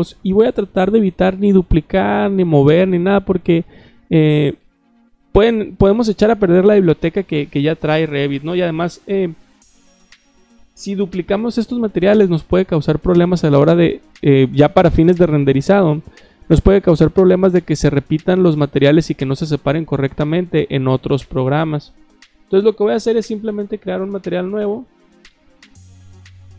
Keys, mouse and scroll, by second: 23.6 click.